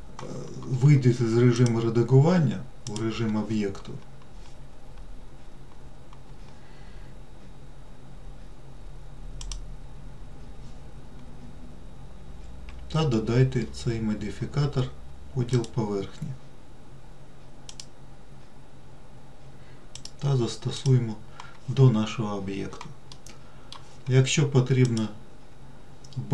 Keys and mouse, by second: 0.2 click, 1.9-3.3 drag, 9.9-15.9 drag, 18.0 click, 20.3-21.2 drag, 23.4-24.1 middle drag, 25.2-26.3 drag.